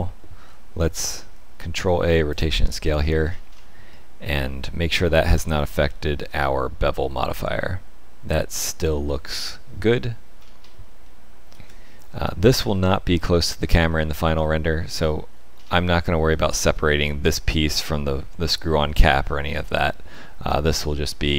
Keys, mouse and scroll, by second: 0.9 ctrl+a, 2.9-3.9 scroll up 11, 3.9 shift+middle click, 4.6 middle click, 5.6 shift+middle click, 8.6 middle click, 9.7-10.3 scroll down 4, 10.3-10.9 scroll up 5, 11.0 shift+middle click, 12.1-13.9 scroll down 8, 12.8 middle click, 13.9 shift+middle click, 15.5-16.0 scroll up 2, 16.0 shift+middle click, 19.1-19.8 scroll down 5, 20.1 shift+middle click, 20.6 middle click.